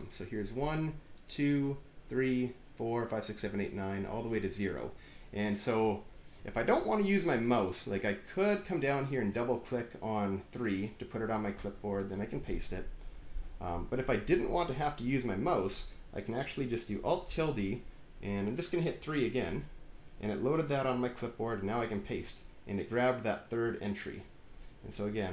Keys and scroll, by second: 12.9 Down, 13.1 ctrl+v, 14.6 Return, 17.1 alt+`, 19.4 alt+3, 21.4 ctrl+v.